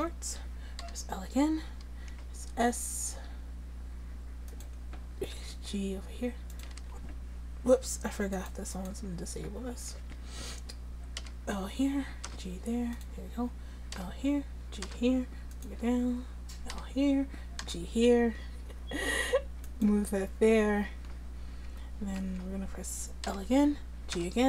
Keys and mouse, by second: 0.9 l, 2.3 s, 5.5 g, 6.8 ctrl+z, 10.0 a, 11.2 l, 12.3 g, 14.0 l, 14.9 g, 16.8 l, 17.7 g, 21.7 Tab, 22.2 Tab, 23.3 l, 24.2 g.